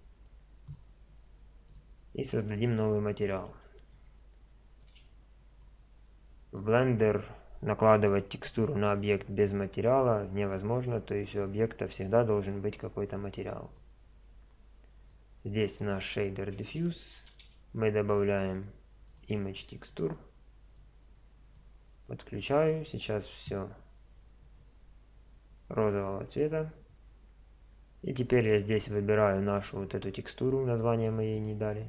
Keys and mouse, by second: 19.2 shift+a.